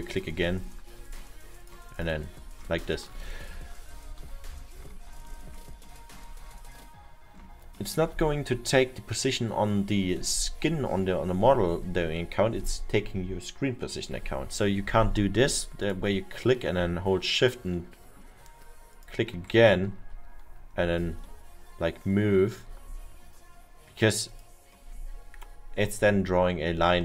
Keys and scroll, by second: 3.2 ctrl+z, 4.0 ctrl+z, 4.4 ctrl+z.